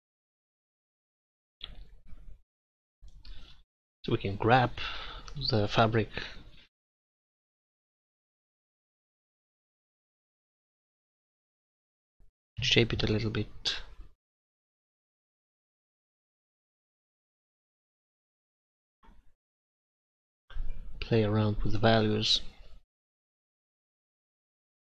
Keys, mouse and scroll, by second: 2.3 click, 5.7 middle click, 6.5-8.4 middle drag, 11.7-14.4 middle drag, 14.6 middle click, 15.0 middle click, 15.8 middle click, 16.8 middle click, 18.7 click, 20.8 middle click, 23.0 middle click, 24.0 click.